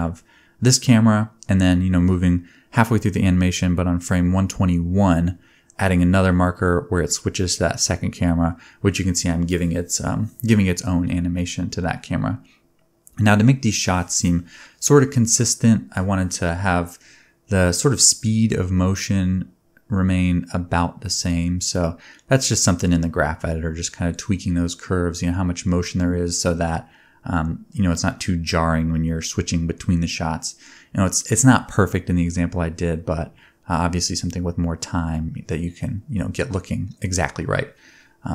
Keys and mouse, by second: 0.0-0.6 typing, 0.7-7.2 drag, 6.7-8.7 typing, 6.9 alt+a, 7.2 middle click, 8.6 click, 9.9 space, 10.7 space, 11.6 middle click, 12.0 click, 12.9 space, 13.2 middle click, 13.9-15.4 drag, 15.4-18.5 middle drag, 15.6 g, 16.8 g, 18.5-20.9 shift+drag, 18.8 g, 20.4 g, 21.1 click, 21.2 g, 21.7 r, 24.2 r, 25.2 r, 26.1-31.5 shift+drag, 26.3-31.0 typing, 32.1 click, 32.5 Tab, 33.0 1, 33.0 click, 33.4 shift+click, 33.7-36.4 middle drag, 33.7 g, 36.4 click, 36.5 shift+middle click, 37.1 shift+click, 37.2 shift+middle click, 37.4 g, 38.2 Tab.